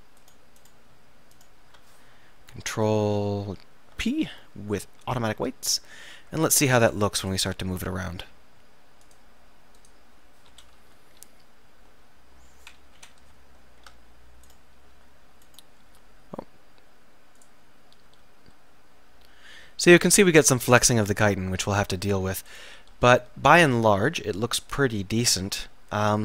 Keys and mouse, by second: 4.0 ctrl+p, 6.9 click, 10.6 KP_7, 12.0-13.2 middle drag, 13.0 KP_7, 14.5-15.7 drag, 15.0 r, 17.5-19.4 drag, 18.2 r, 21.9-25.7 right drag, 22.9 r.